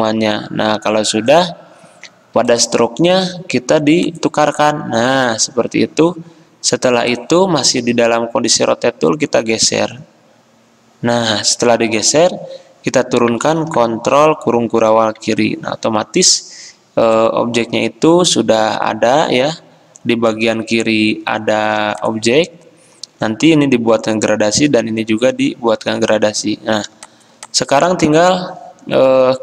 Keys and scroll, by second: 14.1 ctrl+[, 21.8 v.